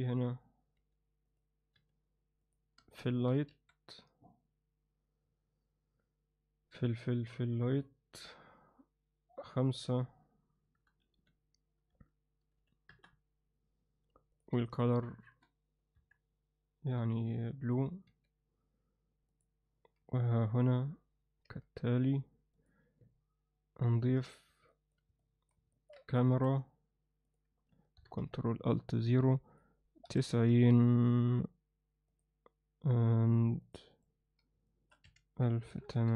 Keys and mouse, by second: 0.0 click, 0.8 g, 1.7 r, 3.5 shift+a, 9.5-13.4 drag, 14.3 drag, 15.9 KP_1, 17.0 g, 18.1 r, 20.2 KP_7, 21.4 g, 24.7 alt+middle drag, 25.2-25.5 alt+middle drag, 25.7 ctrl+alt+middle click, 26.3 shift+a, 28.0 ctrl+alt+KP_0, 29.5-30.6 drag, 31.2 click, 32.1 click, 33.2 click, 33.6 click, 33.9 click, 34.7-36.1 shift+drag, 35.8 0.